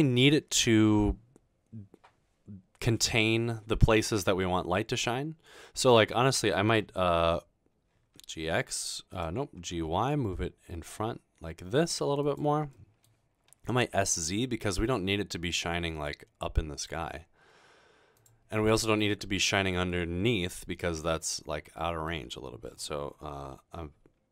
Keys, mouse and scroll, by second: 4.5-6.1 middle drag, 8.1-9.9 typing, 9.1 right click, 12.2 click, 12.7 middle click, 13.7-14.6 typing, 18.2 click, 18.6-19.0 middle drag, 19.9-21.2 middle drag, 21.6-22.1 middle drag.